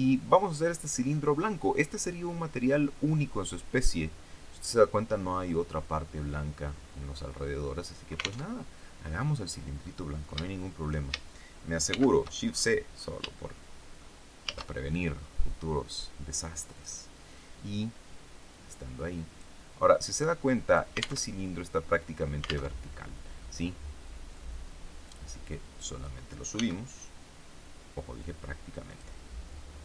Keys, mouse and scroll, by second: 2.8-3.2 scroll down 2, 6.6-7.3 scroll up 3, 8.3 alt+Tab, 11.8 shift+c, 12.4-12.7 shift+scroll up 3, 13.3 shift+middle click, 14.3 shift+a, 16.7 click, 18.4-19.5 drag, 19.9 click, 21.1 alt+Tab, 22.6 alt+Tab, 24.3-26.1 drag, 26.5 s, 28.8 click.